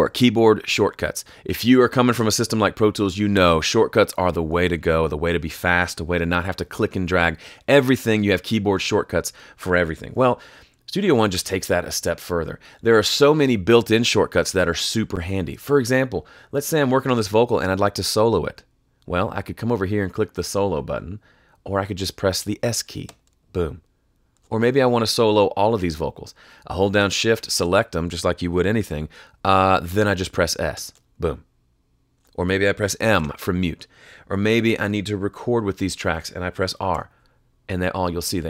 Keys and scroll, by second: 10.2 F3, 23.0 s, 24.3 s, 24.8 shift+s, 30.7 s, 32.1 s, 33.1 m, 34.5 m, 35.3 a, 36.9 r.